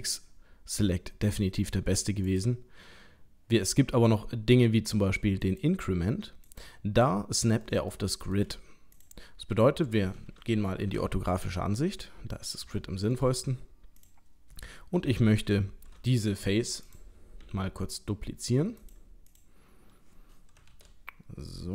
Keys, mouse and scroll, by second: 2.3 click, 6.5 click, 7.0 middle click, 7.9 shift+middle click, 8.9 click, 9.5 l, 11.0 KP_3, 12.0-12.5 scroll up 3, 12.7 shift+middle click, 13.3 scroll up 2, 14.0 click, 16.9 click, 17.4 l, 18.0 scroll down 1, 18.8 click, 18.8-19.3 scroll down 3, 19.3 click, 20.7 shift+d.